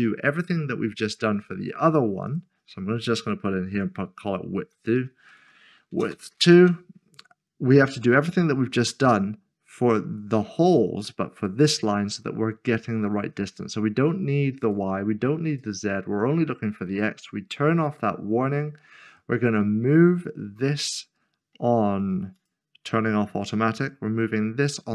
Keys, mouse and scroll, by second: 0.1 scroll down 1, 2.3 click, 3.7 typing, 4.9-6.4 typing, 6.6 Return, 7.6-8.4 scroll down 1, 14.6 click, 16.7-17.2 scroll down 1, 17.9 click, 20.2-22.4 scroll down 1, 22.4 click.